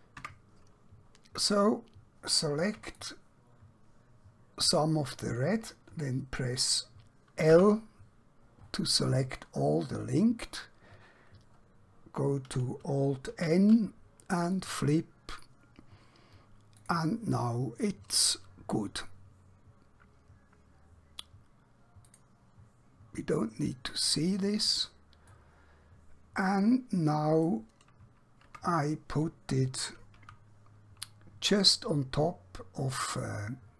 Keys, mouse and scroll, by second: 0.3 Tab, 3.0 click, 7.4 l, 12.5 alt+Num_Lock, 14.5 click, 22.0 click, 25.4 middle click, 28.6 Tab, 30.1 KP_1.